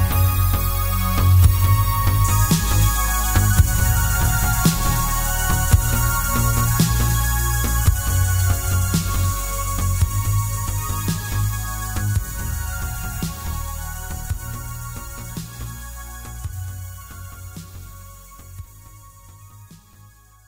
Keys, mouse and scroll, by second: 1.3-2.6 scroll down 1, 2.6-3.2 scroll down 1, 3.2 shift+a, 3.8 s, 4.3 click, 4.5 s, 6.7 click, 6.8 s, 9.2 click, 9.8 s, 10.9 click, 11.3 s, 12.6 click, 12.7 g, 15.0 click, 15.1-17.1 middle drag, 16.5-16.8 scroll down 1, 17.6 g, 20.1 click.